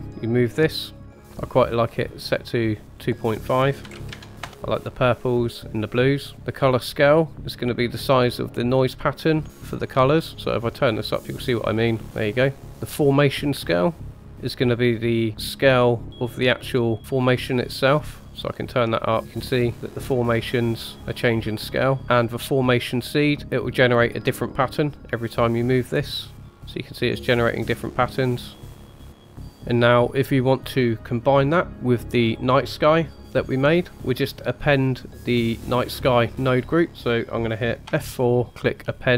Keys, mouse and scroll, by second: 3.0-4.4 drag, 4.7-6.3 middle drag, 9.2-12.6 drag, 13.6 click, 17.0-21.6 drag, 23.4 middle click, 24.8-26.0 drag, 29.1-33.3 middle drag, 29.5 scroll down 3, 33.3 click, 37.8 F4.